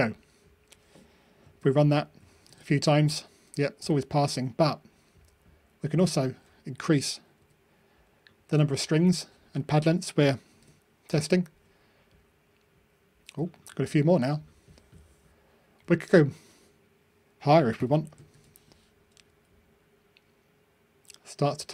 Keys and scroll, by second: 10.4 ctrl+r, 18.3 ctrl+r.